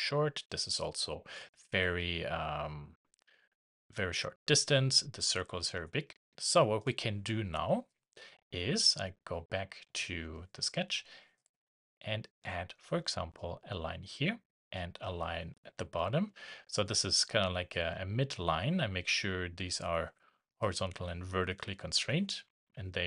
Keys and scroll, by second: 13.9 shift+Escape, 15.9 Escape.